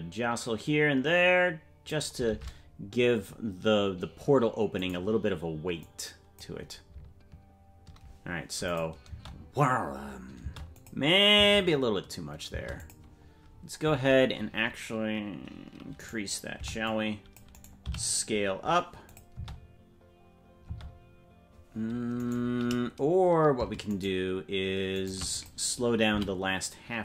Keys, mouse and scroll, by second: 2.2 shift+`, 5.8 click, 8.6 click, 9.0 space, 10.6 space, 10.7 click, 11.3 space, 12.7 click, 12.7 space, 13.5-15.7 scroll up 1, 15.7 scroll up 6, 15.9 right click, 16.5 c, 17.8 s, 19.3 space, 21.3 space, 22.1-24.0 right drag, 25.3 click, 26.0 s.